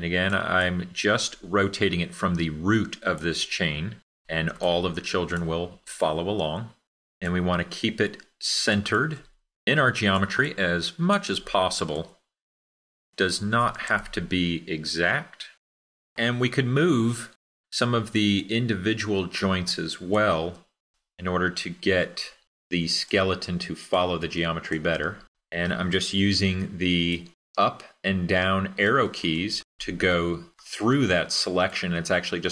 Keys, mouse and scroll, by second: 28.0 Up.